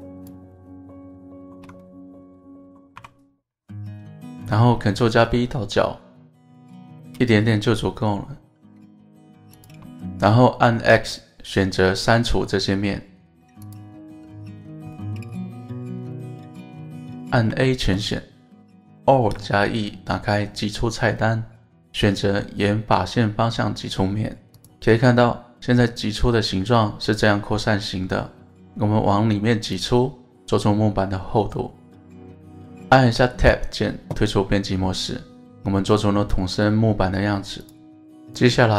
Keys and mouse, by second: 0.2 alt+shift+click, 1.3 alt+shift+click, 1.8 middle click, 3.0 KP_1, 5.0 ctrl+b, 9.6 shift+click, 14.9-16.4 middle drag, 17.0 middle click, 18.4 middle click, 19.8 alt+e, 29.7 click, 30.0 middle click, 31.8-33.6 middle drag, 33.8 Tab, 34.3-34.8 middle drag, 35.2-35.6 middle drag, 36.3 middle drag.